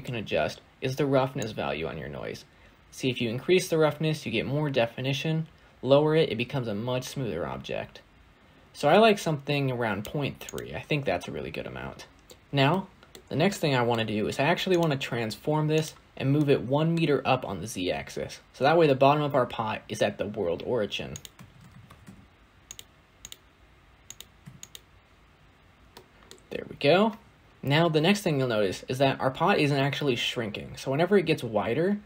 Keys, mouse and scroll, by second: 0.0-1.3 scroll up 2, 1.3-4.3 drag, 10.3 click, 11.5-12.1 scroll down 2, 12.1 scroll down 9, 12.6-13.8 middle drag, 13.8-14.6 scroll up 2, 14.6 click, 15.6 g, 16.3-20.7 middle drag, 20.7 scroll down 1, 21.0 click, 21.4 shift+a, 23.9 click, 25.5 scroll down 2, 25.8-26.6 middle drag, 26.6-27.3 scroll down 10, 27.3 middle click, 27.4-29.9 scroll up 3, 29.9-30.8 scroll up 1.